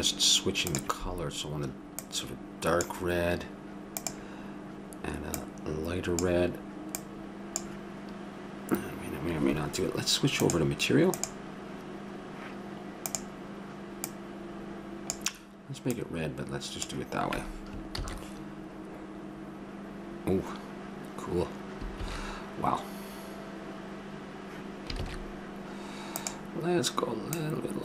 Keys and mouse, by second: 0.7-2.6 drag, 4.0-6.0 drag, 10.3-12.3 drag, 13.1-14.7 drag, 18.3 shift+z, 22.0 shift+z, 25.0 shift+z, 26.2-27.8 drag.